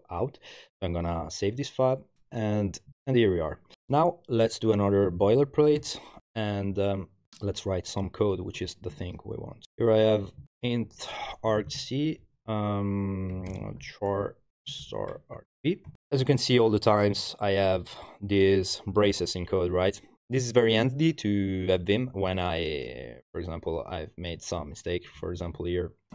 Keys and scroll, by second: 2.9 ctrl+l, 5.3 b, 5.6 Tab, 5.8 Return, 8.9 Tab, 9.4 Tab, 9.5 Tab, 9.6 Tab, 9.9-15.9 typing, 16.1 Page_Down, 16.2 Page_Down, 16.6 Page_Up, 17.2 Page_Up, 17.2 typing, 17.4 Page_Up, 25.2 Left, 25.4 Left, 25.6 Left.